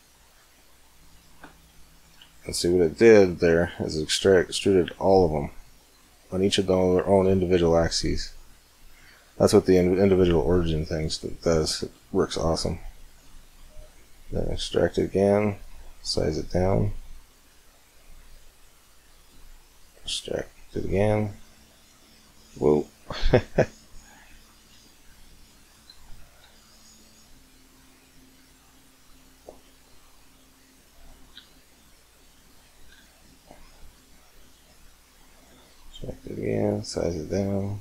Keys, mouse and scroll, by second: 1.4 middle click, 1.6 middle click, 2.3 middle click, 2.6 middle click, 2.9-4.7 middle drag, 4.9 middle click, 5.3 middle click, 7.1 middle click, 7.7 middle click, 8.9-10.4 middle drag, 10.5 middle click, 11.4 middle click, 12.6 middle click, 13.1 right click, 13.7 click, 13.7 right click, 14.1 e, 15.7 s, 19.6 e, 21.4 s, 26.1 s, 31.3 g, 32.9 e, 35.3 s.